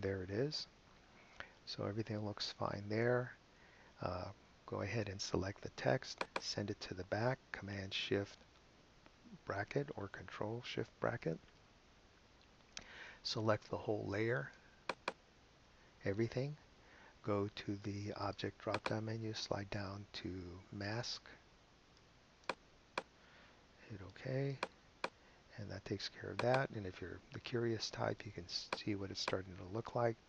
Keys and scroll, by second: 9.5 shift+super+[.